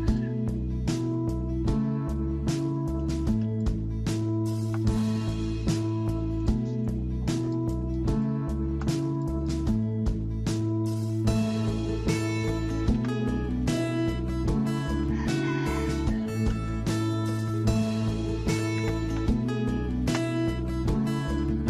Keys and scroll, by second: 13.0 Escape, 18.3-20.7 typing.